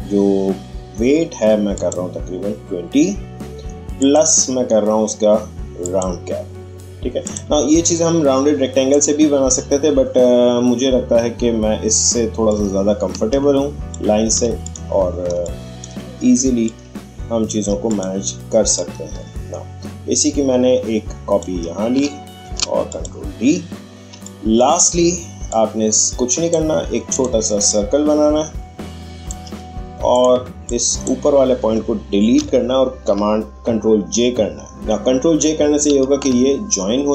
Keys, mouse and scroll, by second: 1.7 click, 12.4-14.6 drag, 12.8 alt+h, 14.6 click, 15.3 space, 15.4 click, 15.8 space, 16.6-22.4 drag, 22.4 ctrl+d, 22.9 click, 24.1 space, 24.2 click, 24.6 space, 25.4-32.3 drag, 25.8 h, 32.3 Delete.